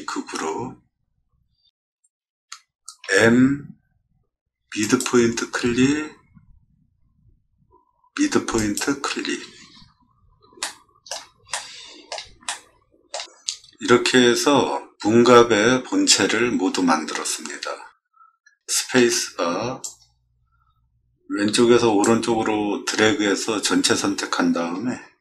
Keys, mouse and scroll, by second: 0.8 middle click, 1.1 middle click, 1.5 middle click, 3.0 m, 4.8 click, 8.5 click, 9.6 middle click, 10.6 shift+middle click, 11.5 middle click, 12.4 shift+middle click, 12.9 shift+click, 18.9 space, 19.8-22.0 drag.